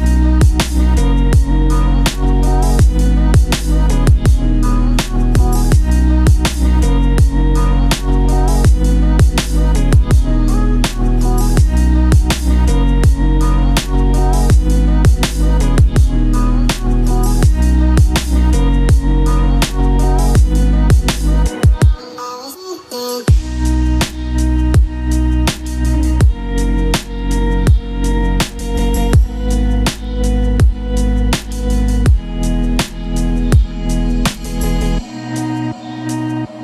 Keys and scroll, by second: 8.6 ctrl+shift+q, 10.9 ctrl+z, 13.7 ctrl+q.